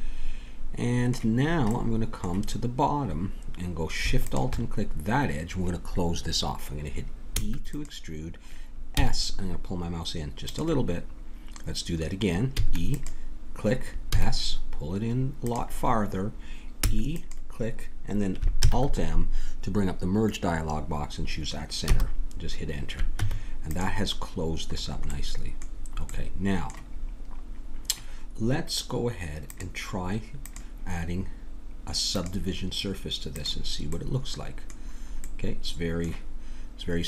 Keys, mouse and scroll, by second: 4.2-7.3 drag, 7.3 e, 9.0 s, 12.5 e, 14.1 s, 16.8 e, 18.7 alt+m, 23.2 Tab, 24.8-29.5 middle drag, 29.5 click, 31.7 click, 33.3-35.4 drag.